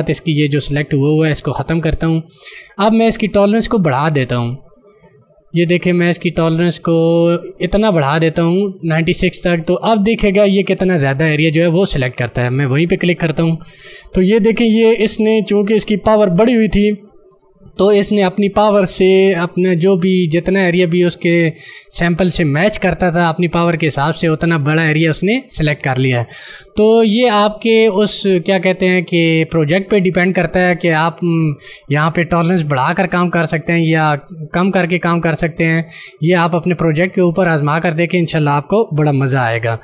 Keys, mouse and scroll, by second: 3.1 click, 13.2 click, 39.3 d.